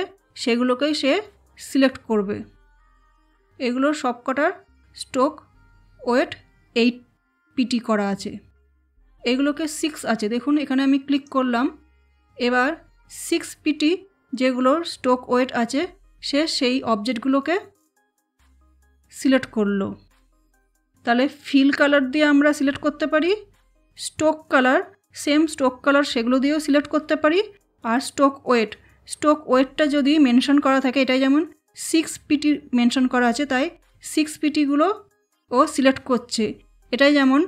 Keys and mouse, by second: 11.1 click, 37.0 click.